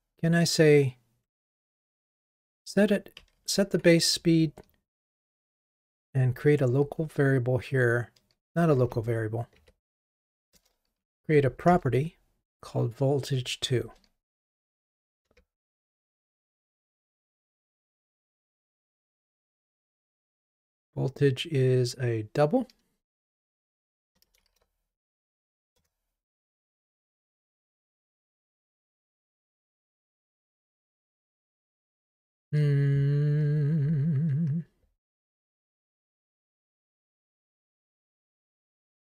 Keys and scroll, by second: 2.3 Escape, 5.2 alt+Return, 8.9 super+z, 9.6 super+z, 10.6 alt+Return, 13.7 alt+Return, 25.9 Return, 37.8 alt+Up.